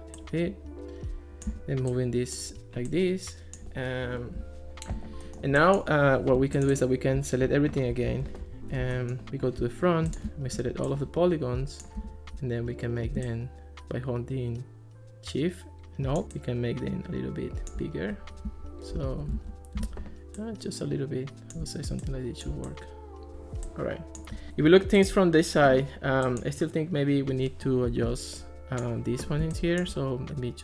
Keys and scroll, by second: 8.1 alt+r, 19.4 super+z, 19.9 super+z.